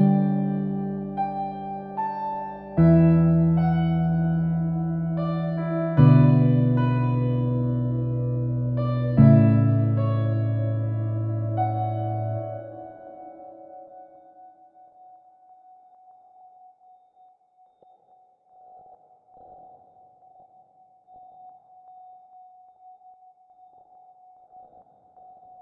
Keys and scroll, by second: 13.2-14.0 typing, 15.0 Return, 17.2-19.4 typing, 20.8-21.5 typing, 24.5-25.6 typing.